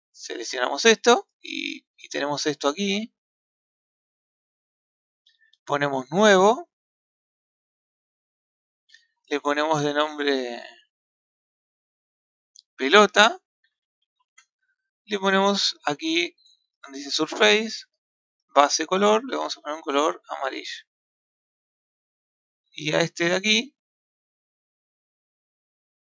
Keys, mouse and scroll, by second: 0.0 click, 3.6 click, 4.4-7.4 ctrl+middle drag, 7.4 click, 8.3-13.5 drag, 17.5 scroll down 1, 18.7 click, 23.4 click.